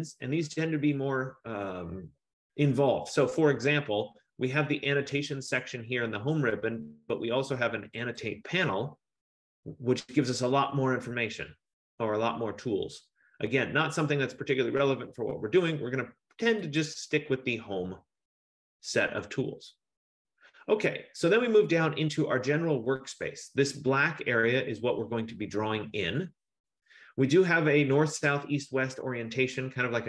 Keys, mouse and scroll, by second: 1.1 click, 3.8 click, 8.2 click, 17.0 click.